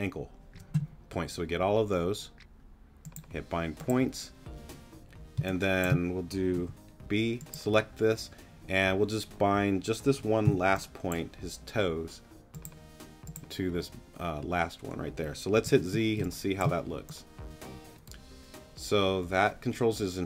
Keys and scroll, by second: 5.3 space, 6.5 b, 10.4 g, 15.6 z, 16.2 space.